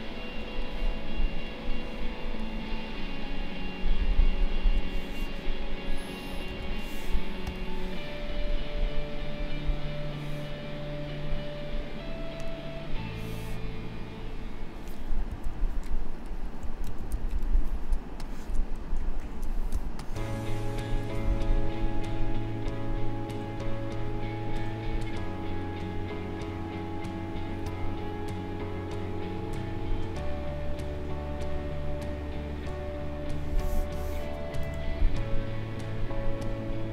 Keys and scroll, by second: 0.3 space, 6.4 ctrl+a, 15.4 shift+l, 16.8 ctrl+=, 17.9 space, 19.2 ctrl+shift+a, 19.7 space, 31.4 Delete, 34.6 l.